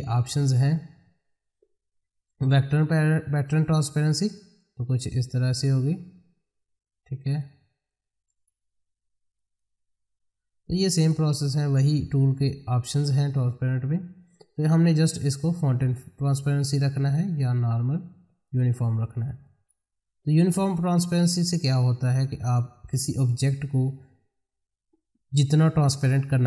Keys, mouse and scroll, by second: 3.6 click, 13.3 click, 18.4 click, 20.5 ctrl+z, 22.3 click, 26.2 click.